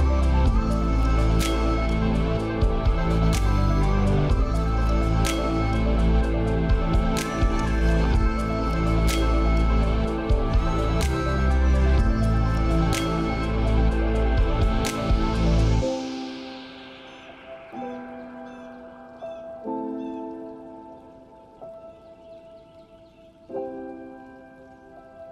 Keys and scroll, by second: 5.7 ctrl+space.